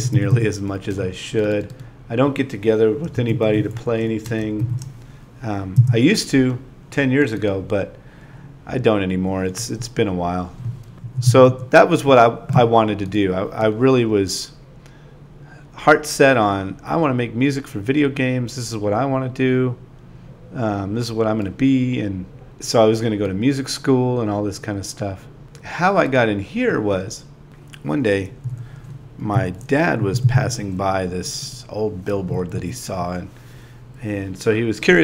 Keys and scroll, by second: 0.3 9, 0.5 space, 3.0 space, 3.8 9, 7.2-11.5 typing, 13.1-18.9 typing, 20.5 super+v, 22.5 o, 22.8 shift+a, 23.4 space, 23.6 space, 28.0 super+v, 29.2-32.1 typing.